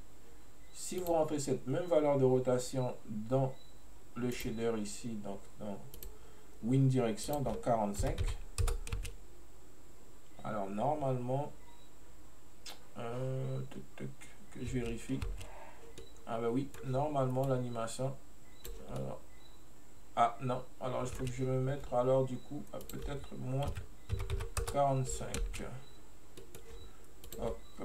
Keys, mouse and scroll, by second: 4.4 click, 6.0 click, 7.3-9.1 drag, 9.1 space, 15.3 space, 16.1-17.5 middle drag, 17.5-19.1 drag, 19.1-21.3 middle drag, 21.3 space, 22.9-25.5 drag, 25.5 space, 26.5 middle click, 27.3 click.